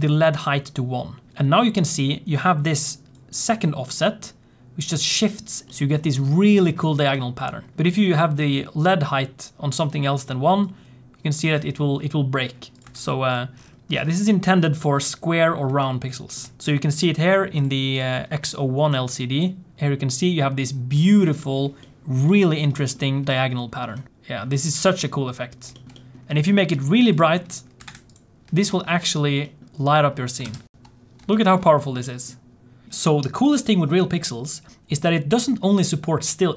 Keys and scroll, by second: 30.4 ctrl+space.